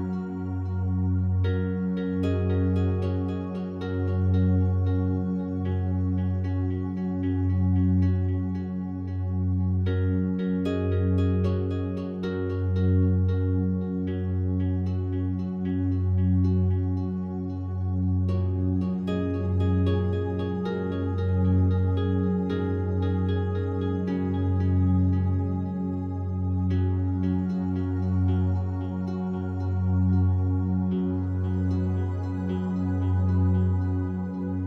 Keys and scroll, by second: 0.0 Return, 3.6 3, 3.9 5, 4.1 Return, 11.3 ctrl+7, 23.4 ctrl+7, 26.6 Return.